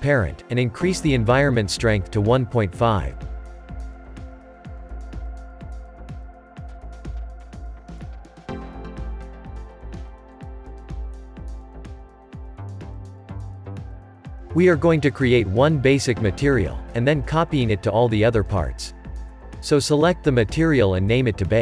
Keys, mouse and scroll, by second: 2.2 click, 3.3-6.4 drag, 8.5 click, 8.9-9.2 scroll down 1, 9.2-13.1 shift+middle drag, 13.1 click, 14.8-18.0 middle drag, 18.0 click.